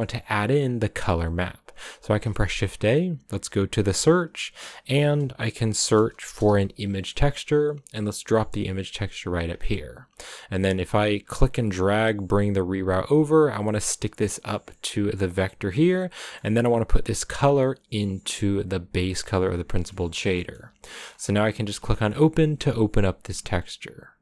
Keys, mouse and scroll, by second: 7.8 BackSpace, 10.8-15.2 right drag, 15.2 click, 15.7-16.8 middle drag, 16.8-17.2 scroll up 2, 17.2 click, 19.9-21.4 middle drag, 21.4-24.2 scroll up 4.